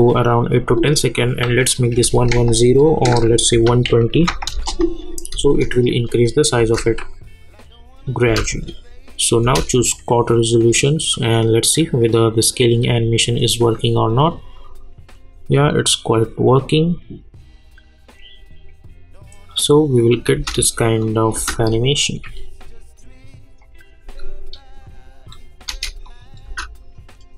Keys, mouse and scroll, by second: 4.5 Return, 6.0 click, 6.6 space, 8.5 click, 9.4 space, 20.3 space, 21.0 click, 21.3 space, 25.6 space, 26.0 click, 26.4 space.